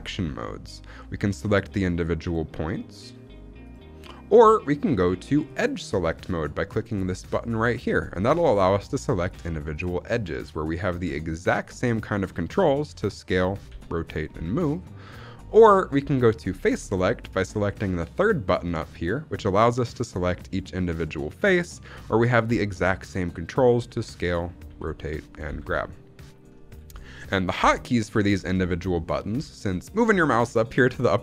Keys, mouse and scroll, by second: 1.5 click, 2.2 click, 2.8 click, 3.5 click, 5.4 click, 8.4 click, 9.1 click, 9.6 click, 10.0 click, 10.6 click, 11.2 shift+click, 13.1 s, 13.6 r, 14.0 right click, 14.2 g, 14.9-16.2 right drag, 18.1 click, 19.3 click, 19.9 click, 20.4 click, 20.8 click, 21.2 click, 21.8-23.1 scroll down 2, 23.8 s, 24.2 right click, 24.6 r, 25.4 right click, 25.4 g, 26.6 right click, 26.9 shift+middle click.